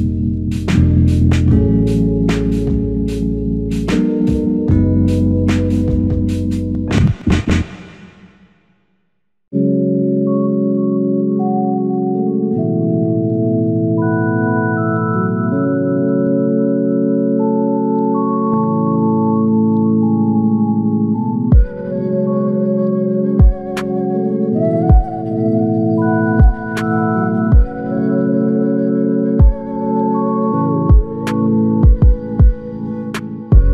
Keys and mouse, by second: 1.6 alt+click, 3.0 f, 3.9 alt+click, 5.4 f, 5.9 double click, 9.7 alt+click, 11.1 double click, 12.2 f, 13.1 double click, 14.7 f, 15.6 double click, 19.5 alt+click, 20.9 f, 21.8 alt+click, 23.0 double click, 24.0 alt+click, 25.2 double click, 26.6 alt+shift+click, 27.3 alt+click, 28.3 double click, 30.5 alt+click, 31.6 double click, 32.9 alt+click.